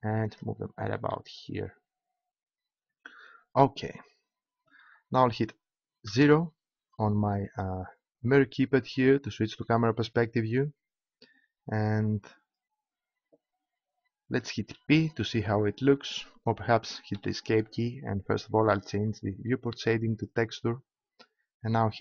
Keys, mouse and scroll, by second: 0.4-2.0 drag, 6.1 KP_0, 14.6 p, 17.1 p, 18.6-20.7 drag, 21.8 p.